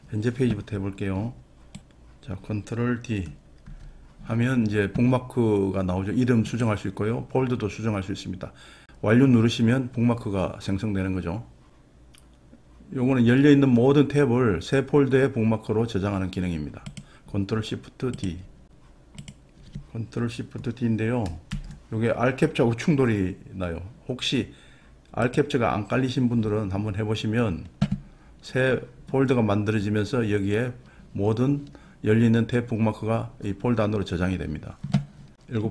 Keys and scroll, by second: 17.1 d, 21.6 d.